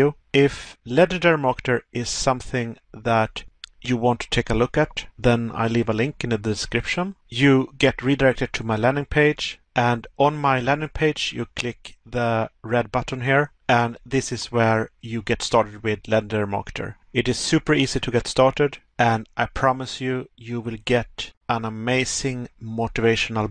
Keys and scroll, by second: 4.6 Pause, 9.0 Pause.